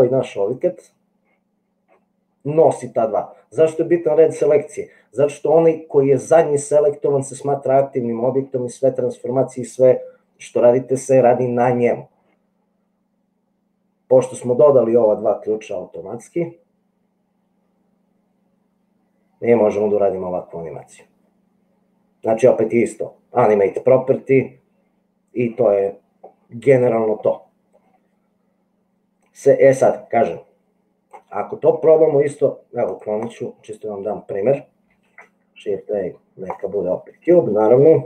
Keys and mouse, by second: 15.6 click, 16.5-17.6 middle drag, 17.6 click, 18.5 middle click, 18.6-22.5 drag, 29.9-30.9 middle drag, 30.9 click, 32.9 click, 35.4 shift+a.